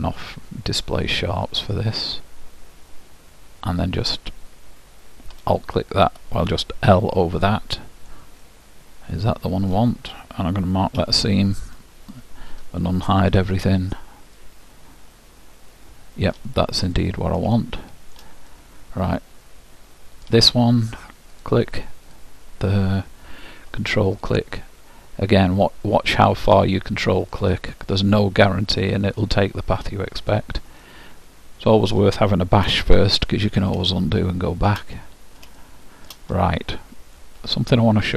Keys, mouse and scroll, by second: 1.2-2.9 drag, 5.5-7.2 drag, 7.0 l, 8.5-10.3 middle drag, 13.3 alt+h, 14.4-16.3 middle drag, 16.9-18.8 drag, 17.6-20.6 middle drag, 21.5-24.1 drag, 24.3-27.3 drag, 27.5-31.9 drag, 30.9-32.7 middle drag, 33.3-38.1 middle drag.